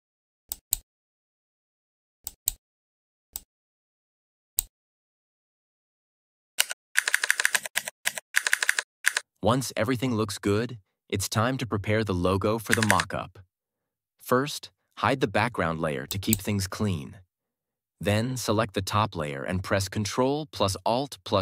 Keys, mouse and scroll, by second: 0.4-4.8 drag, 6.5 Down, 6.9 Up, 7.4 Left, 8.2 Up, 12.6 Up, 16.3 click.